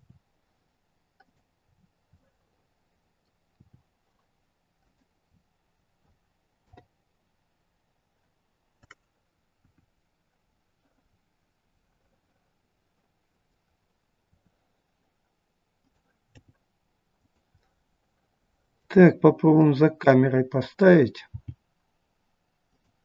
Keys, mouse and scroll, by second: 1.6 scroll up 6, 2.0 middle click, 3.4 r, 5.2 scroll up 5, 6.6 KP_0, 9.6 KP_1, 10.3 scroll down 1, 11.7 middle click, 11.7-12.4 scroll down 7, 13.5-14.2 scroll down 2, 14.2 r, 16.2 g, 17.4 middle click, 19.1 scroll up 3, 19.4 middle click, 21.2 g.